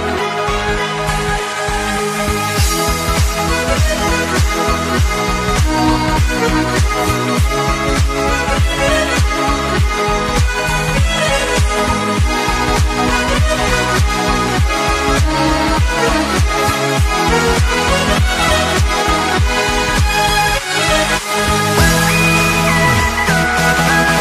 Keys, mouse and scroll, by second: 0.0 b, 1.4 click, 5.3 click, 6.3 click, 9.2-9.9 scroll down 1, 9.9 click, 11.2 alt+Tab, 12.0 click, 13.6 click, 14.6 click, 16.7 scroll down 2, 17.1 scroll up 1, 17.4 click, 17.6 alt+Tab, 18.0 click, 20.0 alt+Tab, 20.3 click, 21.2 click, 21.2 Right, 22.0 click.